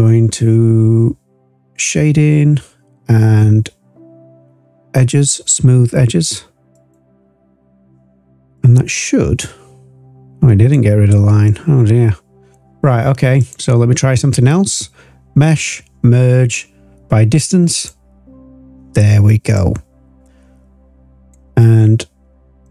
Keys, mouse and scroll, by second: 8.5-10.7 drag, 11.4-12.5 drag, 13.3-18.2 drag, 19.5 click, 20.3 click, 22.6 click.